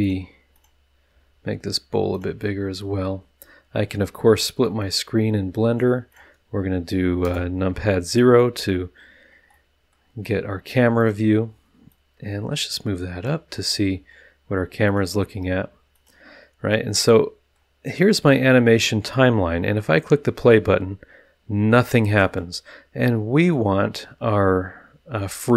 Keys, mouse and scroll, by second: 0.0 click, 0.5 click, 1.1 s, 2.1-3.2 middle drag, 4.8-5.9 drag, 6.1 click, 7.2 KP_0, 9.0 middle click, 9.5 click, 9.6 middle drag, 9.8 drag, 10.2 scroll down 1, 10.3 middle drag, 11.0 click, 11.9-13.4 drag, 13.5-14.2 scroll up 2, 14.8 click, 15.5 s, 15.9 click, 16.7-17.1 drag, 17.1-17.7 middle drag, 17.7 click, 19.9 click, 22.2 click, 23.4 click, 25.2 click.